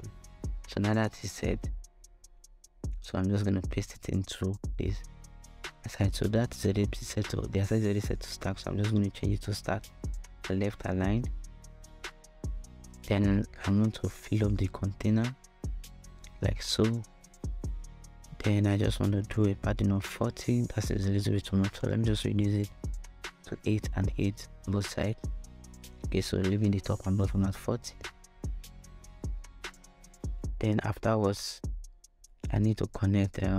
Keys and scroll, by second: 1.8 super+x, 3.4 super+v, 12.8 shift+Return, 18.8 4, 19.2 0, 20.0 Return, 22.3 8, 22.4 Tab, 22.9 8, 23.2 Return.